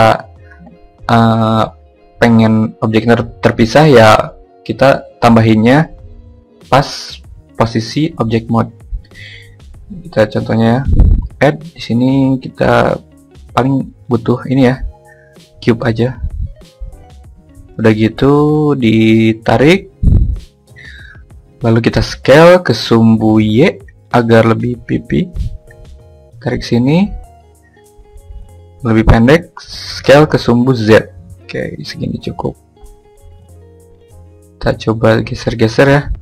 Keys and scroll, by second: 20.9 y, 28.8 z.